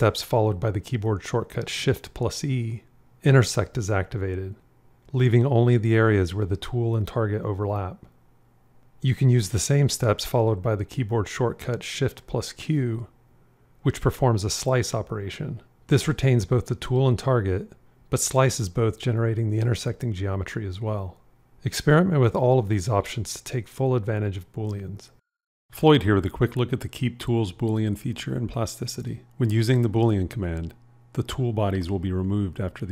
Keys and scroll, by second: 3.8 shift+e, 10.1 q, 13.2 shift+q, 31.2 q.